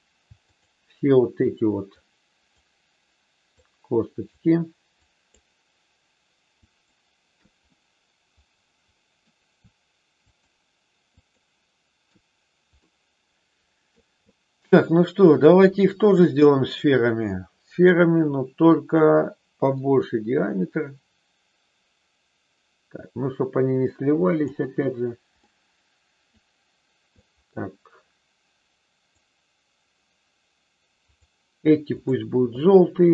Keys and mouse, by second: 0.4-1.4 shift+drag, 2.0 shift+click, 3.5 shift+click, 5.0 shift+click, 6.6 shift+click, 7.7-9.2 middle drag, 10.2-11.2 shift+drag, 12.9-13.9 middle drag, 19.6-24.5 drag, 25.5 middle click, 27.1-29.2 drag, 31.1 click, 32.5-33.1 middle drag.